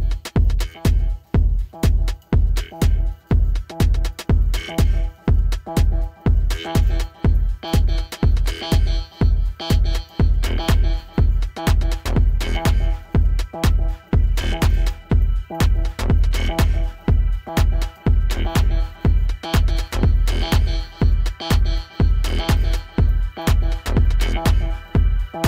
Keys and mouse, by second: 8.0-9.0 drag, 12.8-15.3 alt+drag, 21.5 F4, 23.3-25.4 alt+drag.